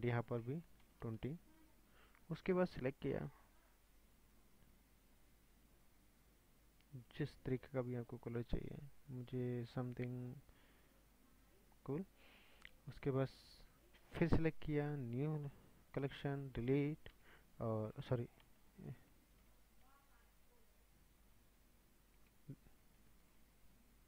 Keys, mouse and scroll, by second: 1.3-4.3 drag, 14.4 click, 15.5 click, 17.1 Delete, 17.5-19.7 scroll down 5, 19.7 ctrl+z, 22.2 Delete, 23.5 ctrl+z.